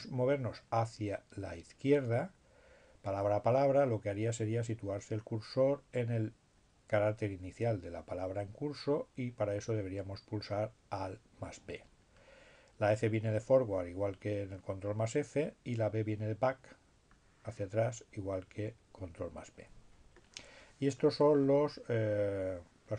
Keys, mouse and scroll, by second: 6.7-7.7 drag, 11.3-12.6 drag, 13.1 click, 16.5-17.5 drag, 18.9-19.9 drag.